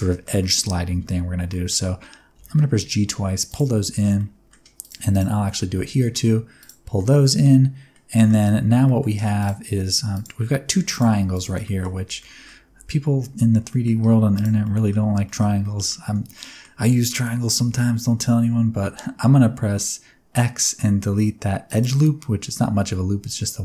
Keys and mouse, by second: 0.1 shift+middle click, 0.4 middle click, 1.5 middle click, 2.3 g, 2.5 g, 3.5 click, 3.9 middle click, 4.2 middle click, 5.1 shift+click, 5.4 middle click, 5.8 g, 5.9 g, 6.6 click, 7.1 middle click, 8.2 middle click, 8.9 middle click, 9.4 click, 10.7 3, 10.9 click, 11.6 middle click, 12.0 alt+z, 12.2 middle click, 12.6 alt+z, 13.7 middle click, 14.2 2, 14.6 middle click, 15.2 shift+middle click, 15.6 middle click, 16.3 middle click, 17.5 x.